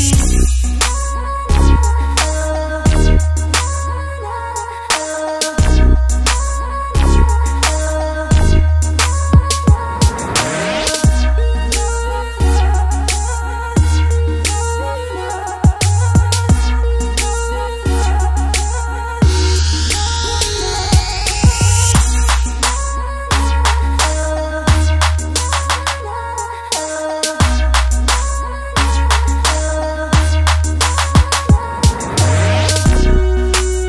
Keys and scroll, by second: 31.1-32.3 typing.